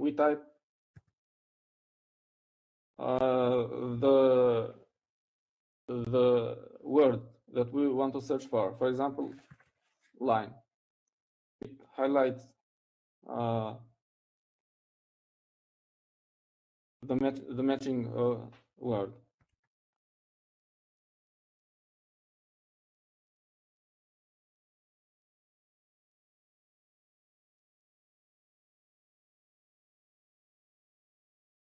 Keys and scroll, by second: 6.2 l, 11.6-12.8 typing.